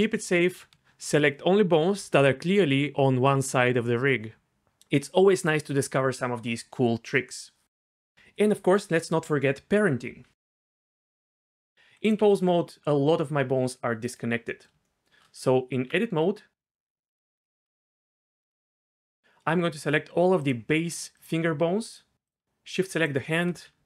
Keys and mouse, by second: 0.3 click, 10.6 Tab, 11.7 g, 12.2 g, 14.5 middle drag, 15.4 Tab, 18.7 click, 21.1 shift+click, 21.8 shift+click.